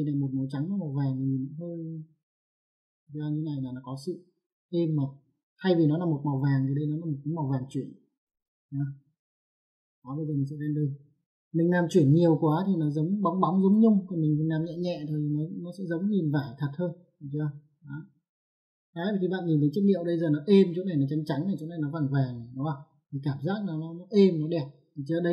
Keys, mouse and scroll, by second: 2.1 click, 4.3 click, 9.3 click, 11.0 click, 18.6 ctrl+1.